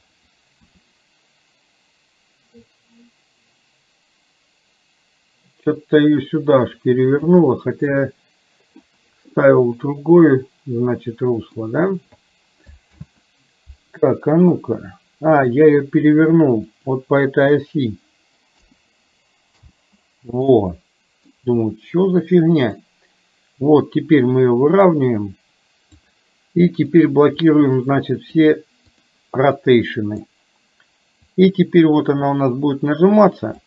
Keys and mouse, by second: 0.7 r, 7.4-8.9 middle drag, 9.6-11.6 middle drag, 12.9 ctrl+z, 14.6-15.6 middle drag, 16.8-19.7 drag, 20.6 middle click, 22.9-26.1 drag, 27.4 click, 28.4 click, 29.1 click, 29.6 middle click, 31.2 click, 31.6-33.6 drag.